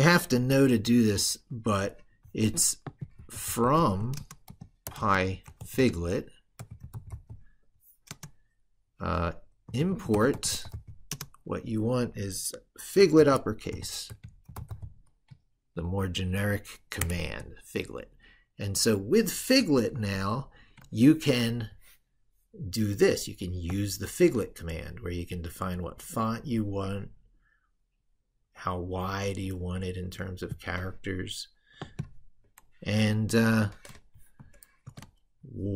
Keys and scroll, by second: 19.7 ctrl+super+Left, 32.9 ctrl+super+Right, 34.7 ctrl+v.